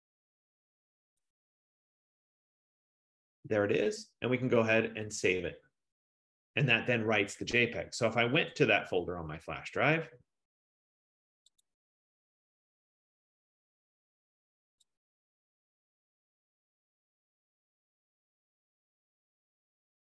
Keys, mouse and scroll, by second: 1.4 click, 1.6 click, 2.5 click, 2.8 click, 5.3 click, 9.0 click, 11.8 click, 15.0 click, 15.3 click, 17.2 click, 17.6 click, 19.2 click, 19.5 click.